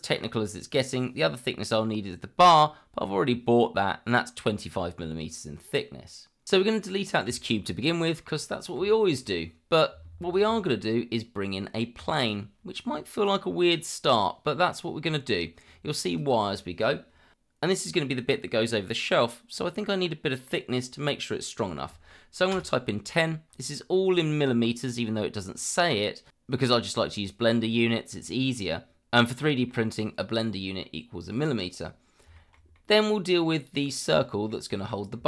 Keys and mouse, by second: 7.3 Delete, 8.9 shift+middle drag, 10.5 shift+a, 14.0-14.4 middle drag, 16.1-22.5 drag, 26.1-26.4 middle drag, 29.7-30.8 middle drag, 32.4 shift+middle drag, 32.7 middle drag, 34.5 middle click.